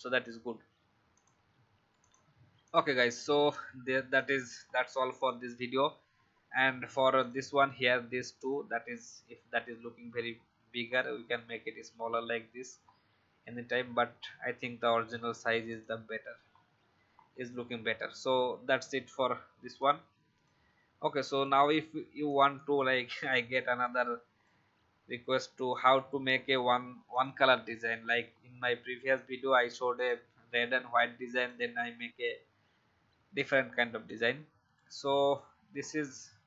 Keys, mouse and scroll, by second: 3.2-3.5 alt+scroll down 1, 4.1 click, 4.6 alt+scroll down 1, 5.1 click, 8.3 shift+click, 10.8-12.8 scroll down 1, 12.8-15.2 scroll up 1, 15.6 click, 16.5 alt+scroll down 1, 17.1-17.8 alt+scroll up 1, 17.9-18.8 alt+scroll down 1, 18.8 click, 20.5 Delete, 21.2 click, 21.5 Delete, 22.2 click, 23.2 Delete, 23.8 click, 25.0 Delete, 25.6 click, 26.5 Delete, 27.1 click, 27.9 alt+scroll up 1, 29.9 click, 35.7-36.4 alt+scroll down 1.